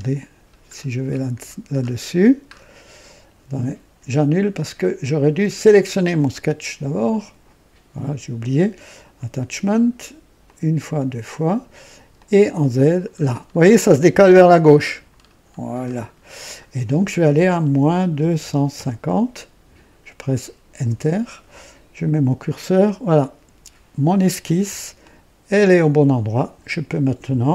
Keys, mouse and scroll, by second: 0.0-0.5 scroll down 1, 0.6-1.7 scroll down 3, 2.1-2.7 scroll down 2, 4.2 click, 5.6 click, 10.4 click, 10.9 click, 12.1 click, 12.6-16.6 scroll down 13, 17.7 KP_Subtract, 18.1 KP_2, 18.5 KP_5, 18.7 KP_0, 20.7 KP_Enter, 25.0-26.7 drag.